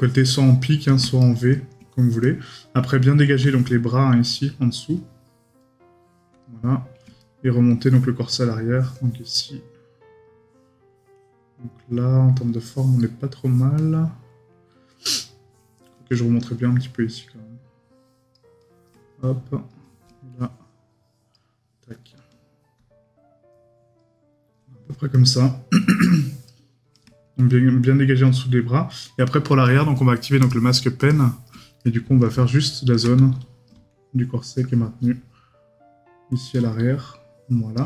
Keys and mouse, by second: 1.2 right click, 7.2 right click, 31.8 right click.